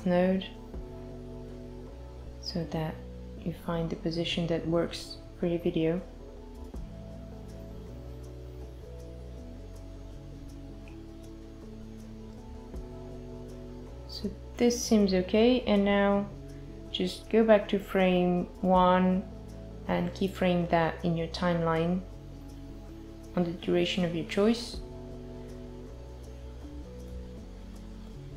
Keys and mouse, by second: 3.0 click, 9.4 click, 14.4 click, 14.9 click, 15.2 click, 15.5 click, 17.1 i, 18.2 click, 19.1 click, 20.7 i, 21.3 space.